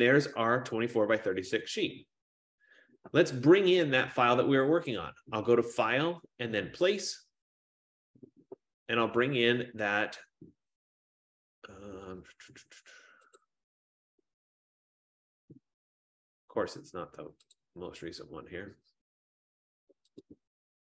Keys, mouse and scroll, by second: 1.7 click, 5.2 click, 7.2 click, 13.6 click, 18.3 click, 20.4 click.